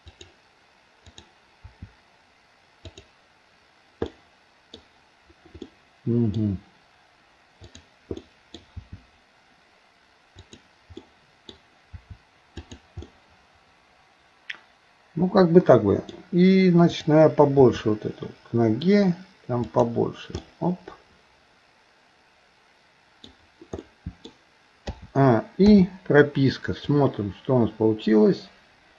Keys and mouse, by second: 1.1 click, 1.6 r, 4.1 middle click, 5.7 middle click, 7.6 click, 8.2 middle click, 8.8 r, 11.0 middle click, 11.9 r, 13.1-16.2 middle drag, 16.9 click, 17.6 r, 20.4-23.3 middle drag, 23.9 middle click, 24.9 a, 25.7 i, 27.0-28.9 drag.